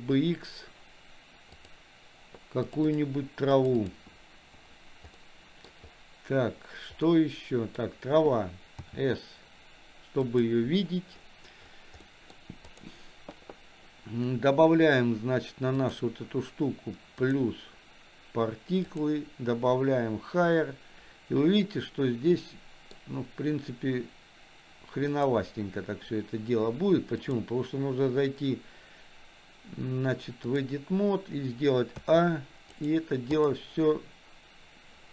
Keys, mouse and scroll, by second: 5.2 middle click, 7.0 middle click, 8.9 s, 12.1 middle click, 12.7 click, 15.8 click, 17.2 click, 19.0-21.4 drag, 22.4 middle click, 25.2 click, 27.3-30.7 drag, 32.0 a, 32.7 right click.